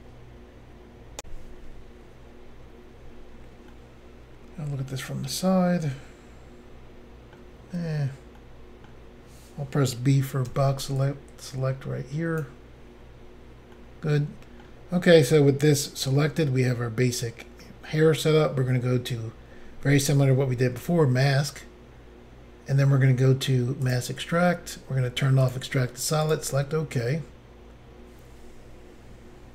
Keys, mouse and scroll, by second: 1.2 Insert, 3.8 middle click, 7.8-8.4 scroll up 3, 8.4 middle click, 10.5 b, 11.0 click, 13.2-13.7 scroll down 2, 13.8 middle click, 15.2 middle click, 20.8 click, 20.9 click, 23.9 click, 24.0 click, 25.6 click, 26.3 click, 26.4 click.